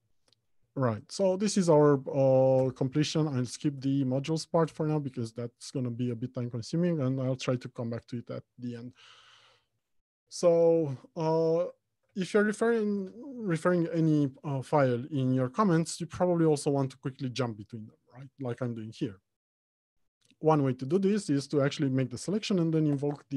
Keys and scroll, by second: 0.9 Left, 11.6 ctrl+shift+Right.